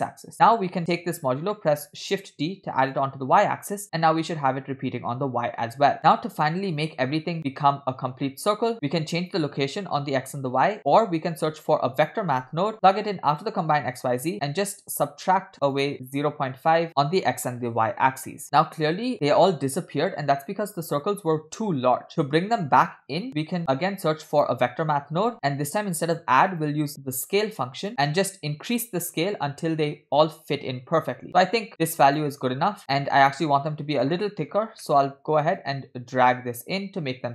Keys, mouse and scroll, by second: 0.3 click, 1.4 scroll down 2, 1.6 shift+middle click, 1.9 shift+d, 6.0 middle click, 6.0 scroll down 2, 8.8 middle click, 8.8 scroll up 3, 10.8 middle click, 10.8 scroll down 1, 11.3 shift+a, 14.0 click, 14.1 click, 14.7-16.0 drag, 16.6-17.9 shift+drag, 22.3 middle click, 23.4 middle click, 23.4 scroll up 1, 23.7 shift+a, 25.7-26.2 drag, 26.5-32.3 drag, 32.9 scroll down 1, 33.1 middle click, 33.8 scroll up 1, 34.1 middle click, 34.4-34.8 scroll up 2, 34.8 middle click, 35.7-37.3 drag.